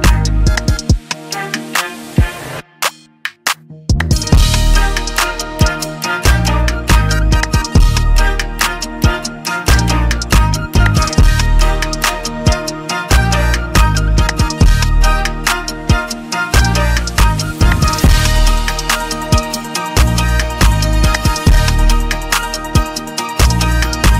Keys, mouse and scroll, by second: 1.2 click, 1.7-2.7 scroll, 4.0 click, 4.7-5.7 scroll, 6.2 click, 6.7 click, 7.1 click, 8.2 click, 9.7 click, 10.9 click, 11.1 click, 12.7 click, 15.1 click, 17.7 click, 19.9 click, 23.0 click, 23.0 [, 23.7 middle click.